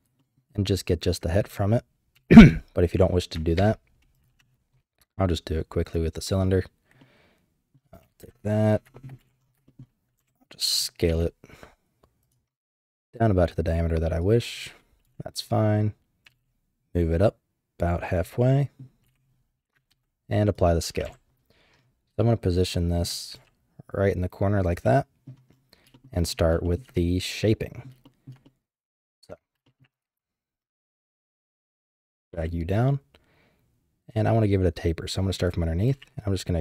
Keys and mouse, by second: 0.2 shift+drag, 2.1 ctrl+z, 3.5 shift+a, 7.0-7.7 middle drag, 8.2 KP_1, 8.9 shift+click, 9.2 z, 9.6 shift+middle click, 10.2 KP_7, 11.1 s, 12.9 g, 15.0 KP_3, 16.2 g, 18.4-18.8 drag, 19.0 z, 19.9 ctrl+a, 21.0 KP_7, 22.2 shift+middle click, 23.3 g, 24.8-25.9 middle drag, 25.9 shift+click, 26.0 shift+middle click, 26.6 shift+drag, 26.7 shift+middle click, 26.9 click, 27.7 middle drag, 28.0 shift+middle drag, 28.4-29.0 middle drag, 29.3 Tab, 29.6 shift+middle click, 31.0 3, 31.4 click, 31.9 click, 32.2 g, 35.9 e.